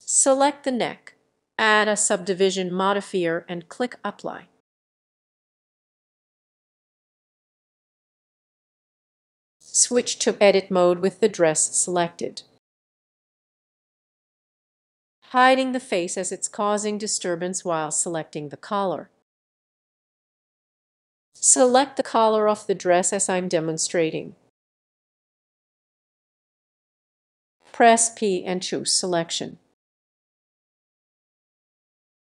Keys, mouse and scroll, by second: 0.2-4.2 drag, 4.9 click, 6.4 click, 13.3-14.3 scroll, 15.1 click, 18.8 click, 20.2 click, 21.1 click, 21.6 ctrl+click, 23.0-24.4 drag, 25.4 click, 26.4 ctrl+click, 27.4 click, 28.0 ctrl+click, 28.5 p, 30.3 click.